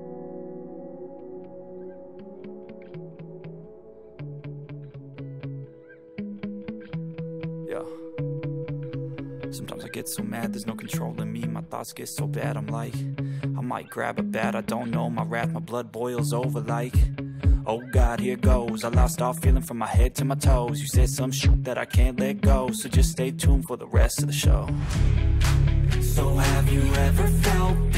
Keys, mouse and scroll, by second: 0.3-2.3 right drag, 2.4 ctrl+KP_Add, 2.8-4.1 ctrl+KP_Add, 8.0 g, 13.5 g, 16.9-19.3 middle drag, 27.3-27.9 drag.